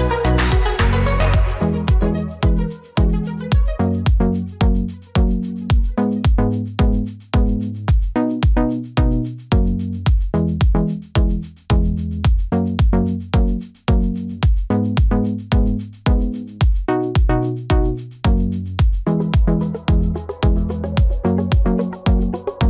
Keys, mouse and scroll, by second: 1.2 right click, 10.0 double click, 21.5 ctrl+click.